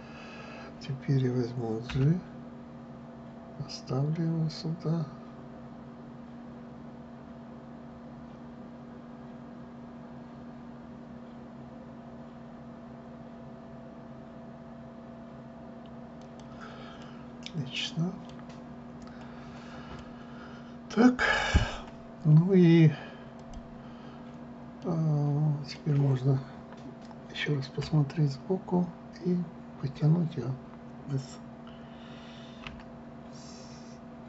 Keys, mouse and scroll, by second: 2.6 g, 17.7-19.6 middle drag, 19.6-20.2 scroll, 20.7-22.3 middle drag, 22.3 scroll down 1, 24.1 click, 25.5-28.5 middle drag, 28.5 KP_1, 33.3 s.